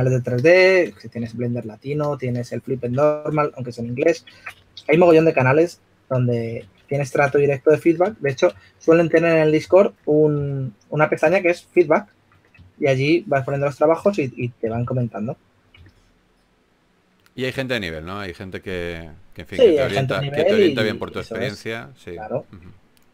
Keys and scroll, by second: 1.5 s, 3.2 typing, 4.2-8.2 typing, 4.6 super+z, 10.2-11.5 typing, 14.7-16.1 typing, 22.8-23.1 typing.